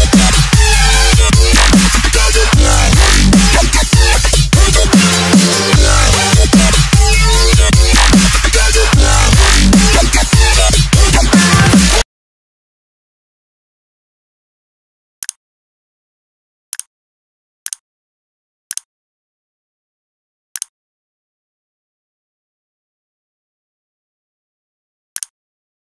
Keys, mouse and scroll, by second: 0.6 z, 1.0 s, 2.3 click, 9.6 click.